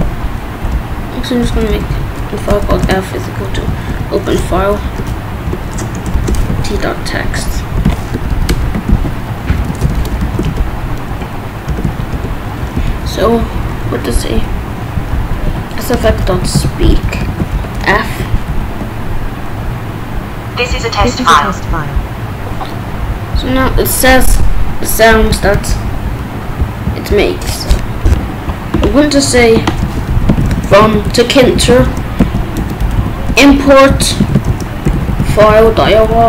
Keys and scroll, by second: 0.7 BackSpace, 1.9-7.6 typing, 4.6 Down, 4.8 Return, 8.1 Right, 8.5 Return, 8.9 ctrl+s, 9.2-11.8 typing, 10.4 Return, 11.7 Return, 12.1 Return, 12.8 Right, 13.0 BackSpace, 15.4-17.5 typing, 18.2 ctrl+s, 24.3 Up, 24.4 Right, 25.8 Up, 29.8-36.2 typing.